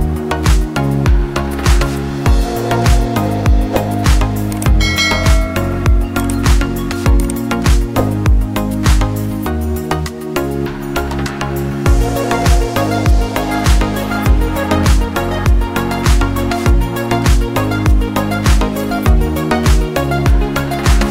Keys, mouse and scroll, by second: 1.8 scroll down 1, 3.3 click, 5.2 click, 7.6 click, 8.2 scroll down 2, 8.5 scroll up 1, 8.6 scroll down 1, 8.9 click, 11.1 scroll up 1, 11.8 click, 13.5 scroll down 1, 15.7 click, 17.4 click, 19.0 click.